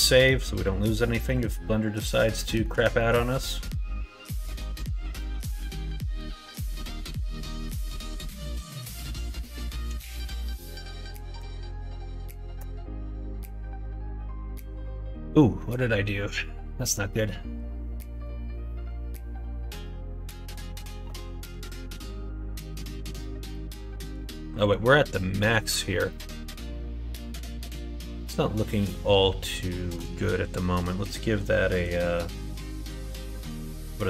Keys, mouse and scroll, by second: 0.8 middle click, 1.2 middle click, 2.4 shift+middle click, 2.9 middle click, 5.1-16.8 drag, 23.1 middle click, 24.5 middle click, 25.1 middle click, 26.0-29.9 middle drag, 31.7-34.0 drag.